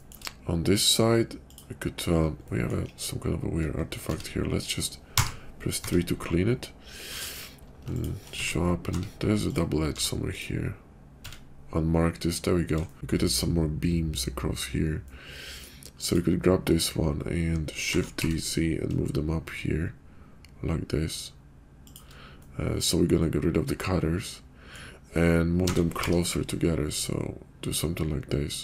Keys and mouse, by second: 2.4 middle click, 3.1 /, 4.0 Tab, 5.0 3, 5.8 Tab, 7.1 q, 8.4 Tab, 8.9 Tab, 9.9 q, 11.2 Tab, 11.9 /, 12.9-14.2 shift+drag, 15.0-15.6 middle drag, 17.9 shift+d, 22.4-24.6 middle drag, 25.5 s.